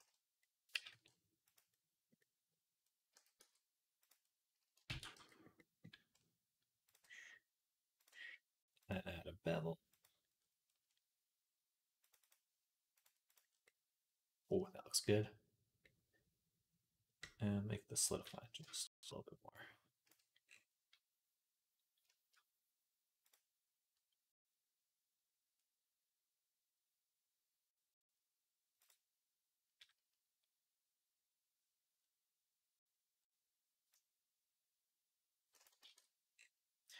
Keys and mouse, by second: 0.6 g, 3.0 s, 4.7 ctrl+a, 5.4-12.8 drag, 13.3 middle click, 15.7-18.4 middle drag, 35.7 ctrl+z.